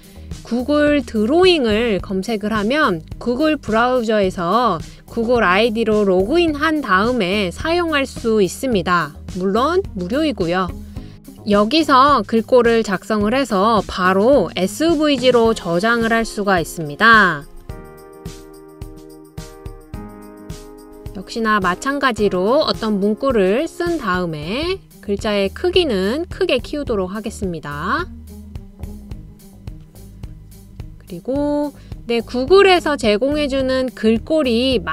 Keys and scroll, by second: 18.7-21.3 typing, 22.0 super+a.